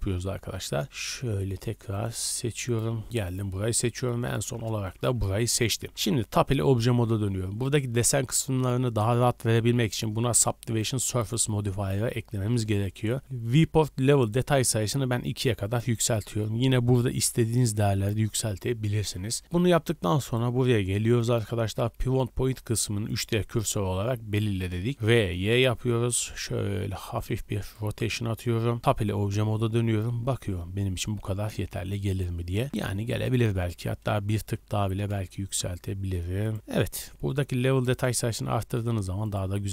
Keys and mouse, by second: 0.9 alt+shift+click, 1.5 alt+shift+click, 1.9 alt+shift+click, 2.6 alt+shift+click, 3.1 alt+shift+click, 4.2 alt+shift+click, 4.6-9.9 middle drag, 6.0 Tab, 19.0 Tab, 24.9 r, 27.7-35.4 drag, 28.8 Tab, 32.7 Tab, 33.1 r, 34.5 r, 35.4-36.5 shift+middle drag, 36.5 Tab, 36.5-38.1 drag.